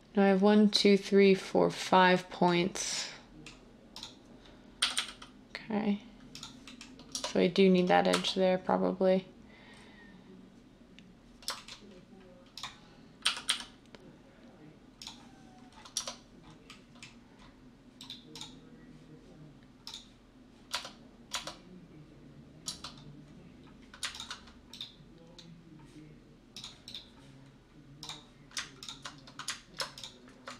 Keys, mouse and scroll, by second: 4.8 g, 4.9 g, 7.1 Tab, 8.1 Tab, 13.3 g, 13.5 g, 15.9 Tab, 20.7 Tab, 21.3 Tab, 22.6 Tab.